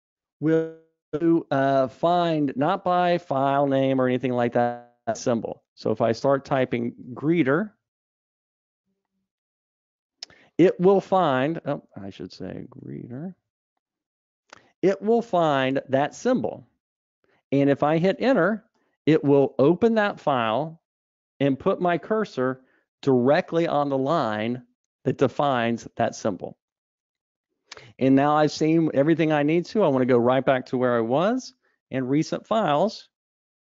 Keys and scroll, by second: 0.1 ctrl+alt+super+o, 12.3 super+a, 33.3 super+e.